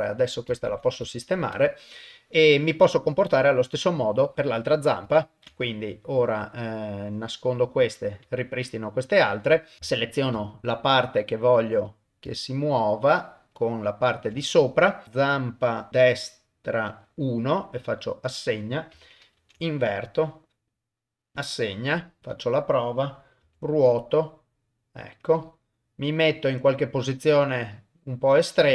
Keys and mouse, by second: 0.7 ctrl+Tab, 1.1 shift+middle click, 3.2 click, 4.3 click, 4.3 ctrl+middle click, 4.3 click, 5.2 ctrl+middle click, 5.6 shift+middle click, 7.1 click, 7.6 click, 8.3 shift+middle click, 9.8 ctrl+a, 9.9 shift+middle click, 10.7-11.8 ctrl+right drag, 12.8 ctrl+shift+right click, 15.7 middle click, 16.9 click, 18.3 click, 19.4 ctrl+i, 20.7 click, 21.4 click, 22.2 ctrl+Tab, 22.2 click, 22.3 click, 23.4 r.